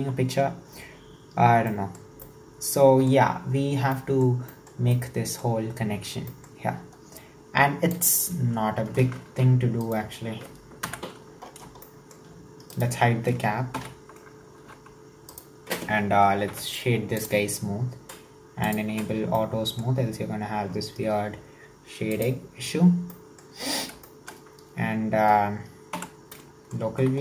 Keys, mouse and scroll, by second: 9.3 alt+z, 9.9 right click, 10.9 KP_1, 11.5-11.9 scroll up 5, 11.9-12.8 shift+middle drag, 12.8 right click, 13.8 h, 14.6 alt+z, 15.3 right click, 16.5 w, 18.6 drag, 19.4-22.1 middle drag, 22.1 click, 23.1-23.6 middle drag, 23.6-24.1 scroll up 2, 24.1-25.9 shift+middle drag, 25.9 /, 26.4-27.0 middle drag, 27.0 Tab.